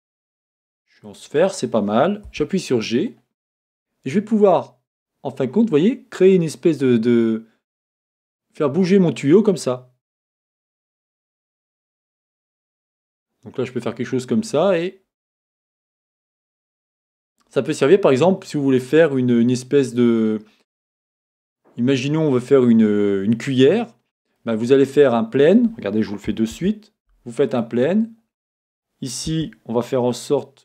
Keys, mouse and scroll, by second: 17.7-29.3 middle drag, 19.7-21.4 scroll, 21.4-23.9 scroll down 2, 23.9-24.4 scroll down 1, 26.5 shift+a, 29.3 s.